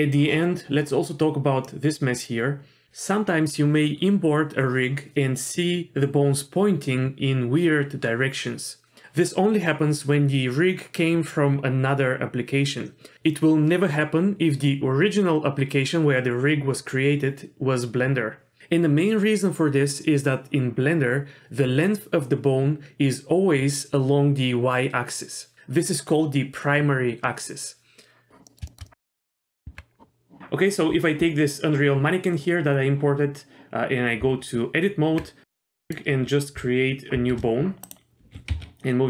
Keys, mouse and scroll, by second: 1.7 middle click, 28.5 middle click, 28.6 shift+middle click, 28.8 shift+middle drag, 29.6 Tab, 34.2 Tab, 35.9 middle click, 37.2 shift+a, 37.8 click, 38.2 g.